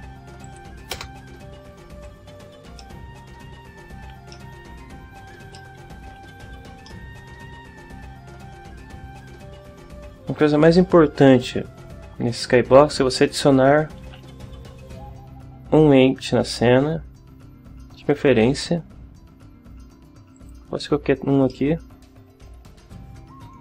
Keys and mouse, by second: 0.4 click, 0.7 KP_0, 0.9 KP_Enter, 2.8 middle click, 4.3-5.3 ctrl+drag, 5.5 ctrl+click, 6.3 a, 6.8-8.9 drag, 14.0 shift+a, 20.3 click, 21.5-22.5 drag.